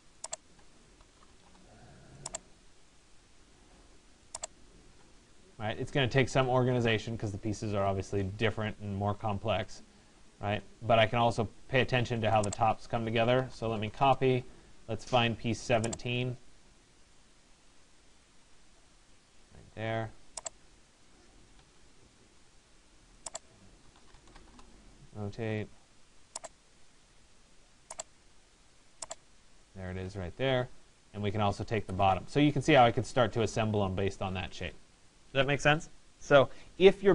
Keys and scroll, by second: 1.1 Return, 13.6 Return, 21.3 Escape, 29.5 Escape.